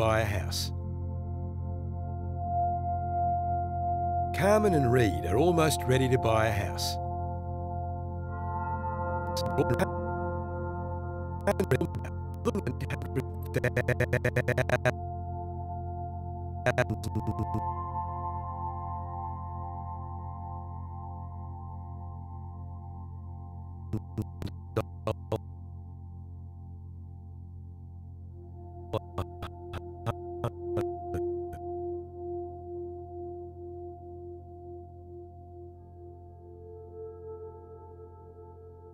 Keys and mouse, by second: 1.0 space, 2.0 alt+shift+click, 3.3 click, 7.4 space, 8.9-14.7 drag, 16.6 click, 19.8 click, 21.2 i, 21.8 click, 23.9 Right, 24.1 Right, 24.4 Right, 24.7 Right, 25.0 Right, 25.4 Right, 26.2 g, 26.5 z, 27.6 shift+click, 28.9 Right, 29.6 Right, 30.0 Right, 30.4 Right, 30.7 Right, 31.1 Right, 31.5 Right, 32.8 g, 33.5 z, 34.6 shift+click, 35.4 r, 35.8 z.